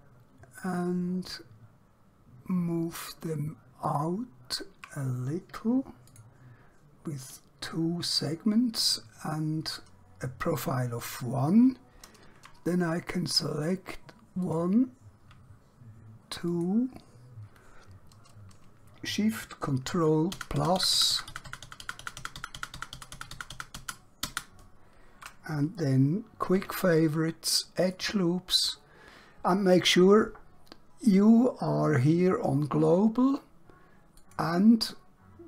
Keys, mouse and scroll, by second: 3.8 shift+click, 6.1 click, 14.4 click, 16.5 shift+click, 20.3 ctrl+shift+KP_Add, 26.6 q, 27.9 click, 34.1 click.